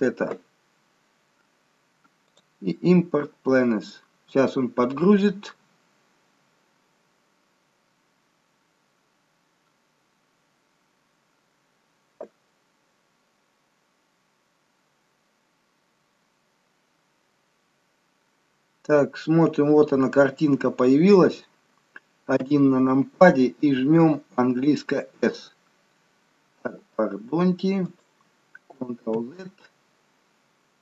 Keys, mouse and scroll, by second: 13.4 scroll up 1, 18.2-19.0 scroll up 4, 19.0-19.7 scroll down 4, 19.7-21.4 scroll up 2, 21.4-22.1 scroll down 2, 22.7 KP_1, 24.9 s, 29.9 ctrl+z.